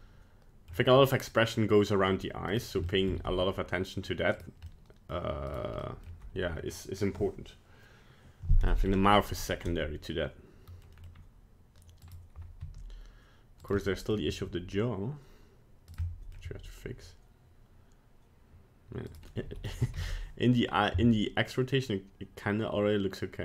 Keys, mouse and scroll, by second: 2.5 right click, 2.9 shift+middle click, 3.3 g, 4.7 middle click, 5.5 right click, 5.8 middle click, 8.9-9.8 scroll up 2, 9.8 middle click, 11.0 scroll down 1, 11.1 middle click, 12.1 right click, 12.6 r, 13.8 middle click, 14.3 r, 16.1 middle click, 16.5 r, 19.4 middle click, 19.8 r.